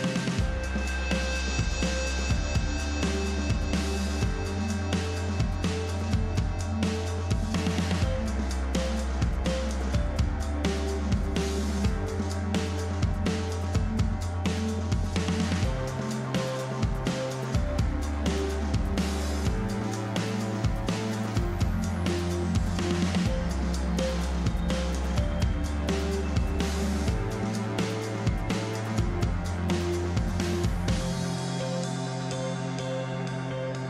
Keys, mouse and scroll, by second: 2.3 click, 3.7 click, 5.9 click, 6.8 click, 7.5-8.6 drag, 11.2 click, 12.7 click, 14.4 click, 15.1-22.4 drag, 27.0 click, 28.3 click, 29.3 click.